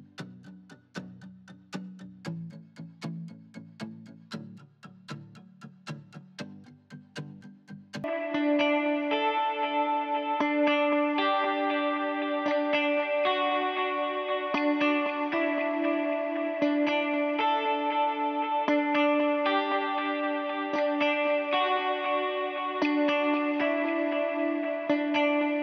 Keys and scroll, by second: 8.0 s.